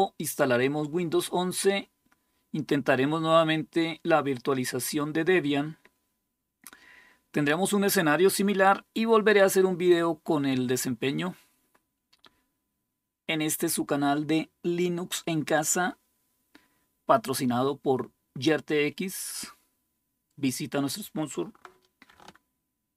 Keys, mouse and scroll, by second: 22.7 ctrl+super+0.